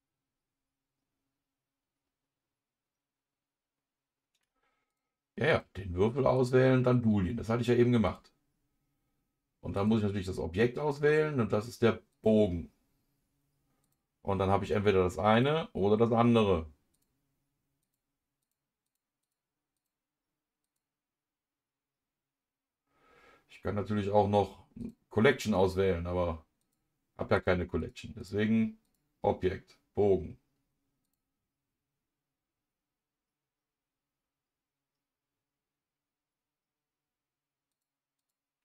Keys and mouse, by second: 4.9 click, 5.5-13.1 drag, 13.8 click, 15.3-17.0 middle drag, 17.8 middle click, 18.4 middle click, 18.8 middle click, 19.7-26.6 middle drag, 26.6-27.8 drag, 28.9-31.1 drag, 37.7 click.